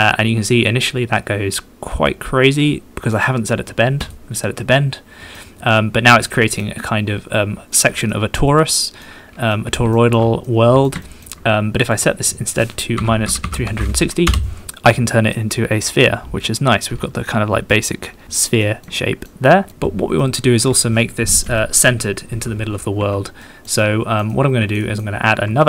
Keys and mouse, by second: 0.0 middle drag, 2.8-3.2 middle drag, 4.6 middle drag, 5.4-6.2 middle drag, 6.6 middle click, 7.3 middle click, 7.8 middle click, 9.1 middle click, 9.5 middle click, 10.0 shift+middle click, 10.5 middle click, 11.1 shift+middle click, 11.9-14.6 middle drag, 14.7 middle click, 15.3-16.9 middle drag, 17.3 middle click, 17.5 middle click, 18.2 shift+middle click, 18.6 middle click, 19.0 shift+middle click, 19.5 shift+middle click, 20.2-21.5 middle drag, 21.5 KP_1, 23.4 shift+middle drag, 23.8-24.2 middle drag, 24.3 middle click, 24.8 shift+middle drag.